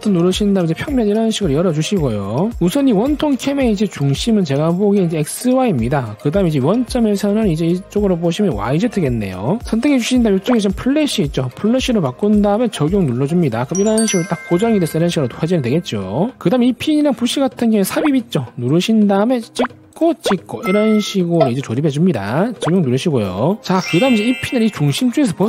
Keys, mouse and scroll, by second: 0.4 click, 2.0 click, 6.5 click, 12.5 click, 13.2 click, 16.4 c, 18.9 click, 20.2 click, 21.6 click, 22.9 click, 24.4 g, 24.7 click, 25.3-25.4 drag.